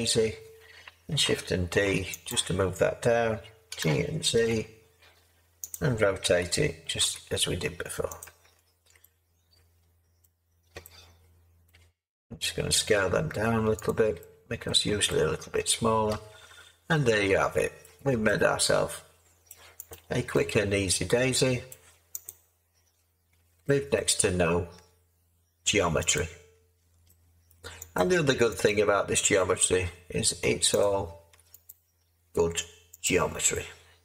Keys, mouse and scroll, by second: 1.7 d, 3.7 g, 4.3 z, 6.4 r, 7.0 r, 8.4 Tab, 12.9 s, 14.6 Tab.